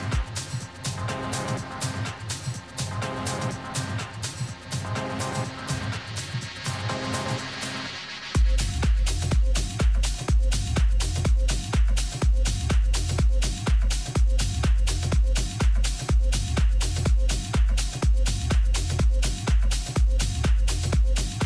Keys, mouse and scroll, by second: 1.6 a, 2.4 z, 3.8-5.5 middle drag, 15.6-18.3 middle drag, 18.4-20.3 right drag, 19.5 KP_3, 20.4 z, 20.8-21.4 middle drag.